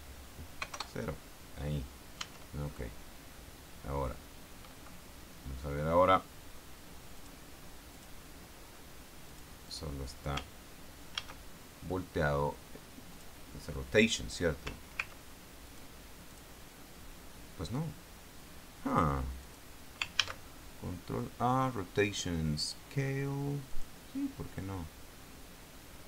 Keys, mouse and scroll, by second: 0.9 KP_0, 1.1 KP_Enter, 2.5 Tab, 7.5 click, 8.3 click, 9.6 click, 10.0 click, 11.5 ctrl+a, 13.5 click, 16.0 click, 16.6 click, 19.2 click, 19.8 click, 20.5 ctrl+a, 24.1 click.